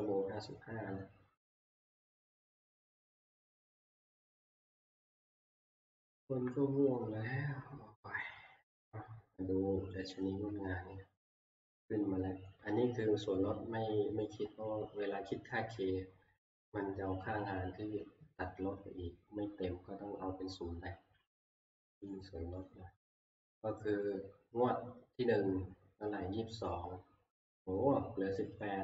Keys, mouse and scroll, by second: 10.1-18.0 drag, 22.1 click, 22.7 click, 23.2 click, 26.7 click, 28.6 click.